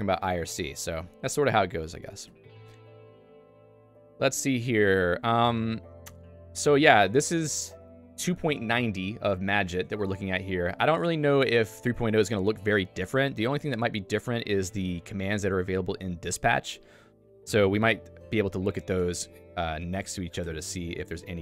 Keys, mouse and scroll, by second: 2.6 j, 4.2 ctrl+alt+;, 9.9 ctrl+d, 10.7 ctrl+u, 19.0 ctrl+g, 19.8 click, 20.4 q.